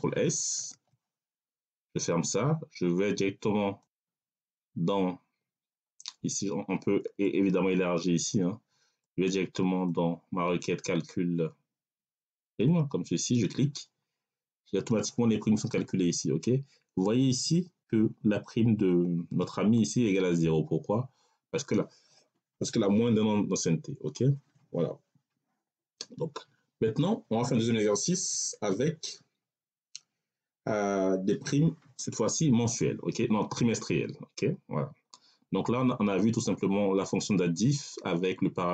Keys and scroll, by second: 0.4 ctrl+s.